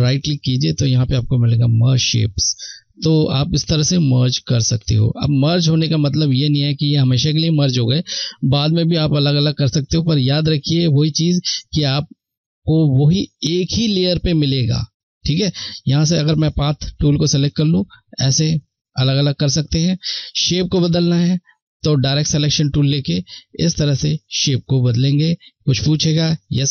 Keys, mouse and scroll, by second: 1.9 click, 2.2 click, 15.2 click.